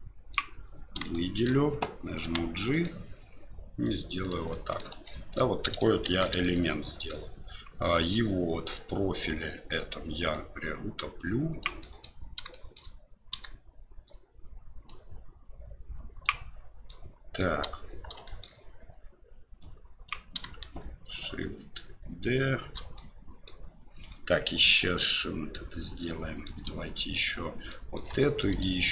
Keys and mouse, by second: 1.1 shift+middle click, 2.2 g, 4.6 middle click, 4.9 Tab, 5.6 middle click, 6.1 shift+z, 6.4-7.1 middle drag, 7.8 middle click, 8.7-9.9 middle drag, 10.3-11.8 drag, 11.8-12.1 middle drag, 12.6 shift+middle click, 15.0-16.3 drag, 16.9 middle click, 18.3 shift+middle click, 19.7 click, 23.0-23.5 middle drag, 24.2-26.5 middle drag, 27.8 middle click, 28.3 shift+middle click.